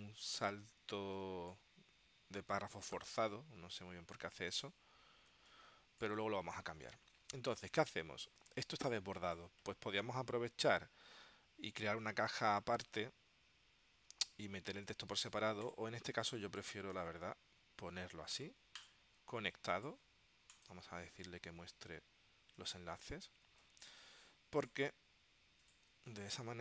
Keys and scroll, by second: 1.1 space, 5.4 space, 8.7 space, 16.3 space, 19.5 space, 23.6 space, 26.1 space.